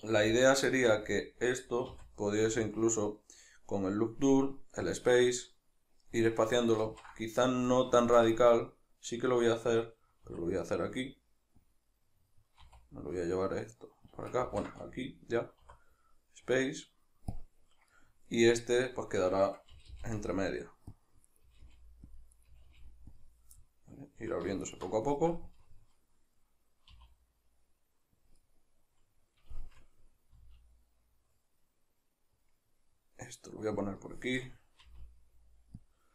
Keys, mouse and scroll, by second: 0.3 alt+right click, 0.7-5.8 shift+middle drag, 1.9 w, 6.9 ctrl+z, 7.7 middle click, 10.3-11.7 middle drag, 10.3 e, 11.7 click, 12.0-14.3 middle drag, 12.7 e, 14.3 click, 14.5 ctrl+z, 15.7 w, 17.9 middle click, 18.6 right click, 19.7 g, 21.0 click, 21.3 right click, 21.4 g, 22.2 click, 22.3 right click, 22.5 g, 23.2 click, 23.6-24.6 middle drag, 24.6 alt+right click, 25.0-28.3 shift+middle drag, 26.9 e, 28.3 click, 28.4-33.9 middle drag, 30.4 e, 33.9 click, 34.1-35.9 shift+middle drag, 34.9 e, 35.9 click.